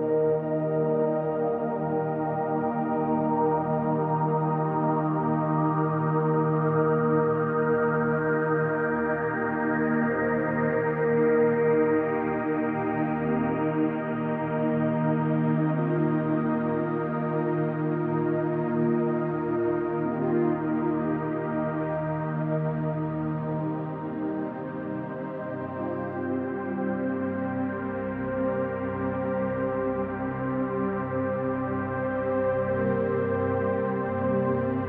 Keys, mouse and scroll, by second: 1.8 z, 2.5-8.0 middle drag, 3.7 alt+n, 5.3 scroll down 2, 5.9 scroll down 2, 6.5-7.1 scroll up 2, 7.1 ctrl+r, 8.0 click, 8.4 middle click, 8.9 click, 11.2 alt+click, 13.2-14.9 middle drag, 13.6 scroll down 2, 14.1-14.9 scroll up 2, 14.9 alt+click, 15.3-21.2 middle drag, 17.3 KP_1, 18.3 z, 20.1-20.7 scroll up 2, 20.7-21.2 scroll up 1, 21.2-23.6 drag, 23.6 e, 24.9 click, 25.1 r, 26.0 click, 26.7 e, 28.4 click, 29.3 g, 30.1 click, 30.2-31.9 middle drag, 31.9-34.2 drag, 34.2 f, 34.4-34.8 drag.